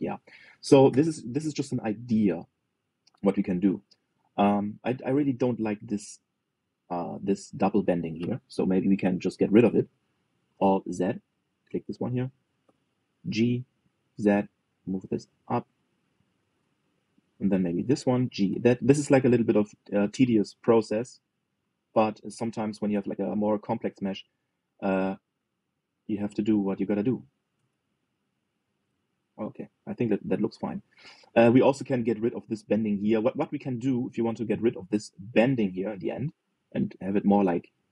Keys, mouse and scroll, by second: 0.0-1.6 middle drag, 1.6 KP_3, 2.6-3.5 scroll up 2, 3.5-4.0 scroll up 2, 4.0-6.5 shift+middle drag, 11.2 alt+z, 12.1 click, 13.9 g, 17.8 click, 18.9 g, 21.6 click, 22.6 g, 26.1 click, 27.8 g, 29.7 click, 34.7 shift+middle click, 35.1 scroll up 1, 35.4-37.9 shift+middle drag.